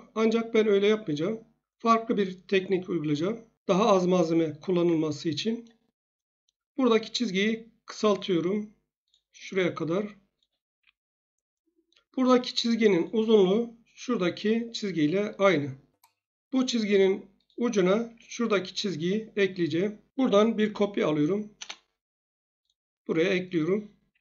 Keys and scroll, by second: 10.7 Escape, 15.4 Escape, 18.1 Escape, 20.0-21.2 typing, 21.5 Return, 24.1 Escape.